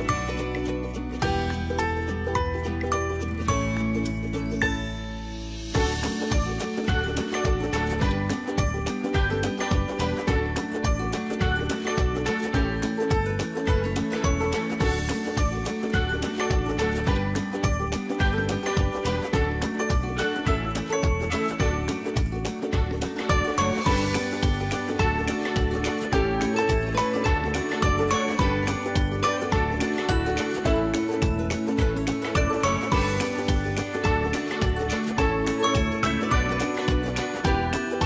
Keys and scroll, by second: 6.3 Left, 24.4 Left, 37.1 Left.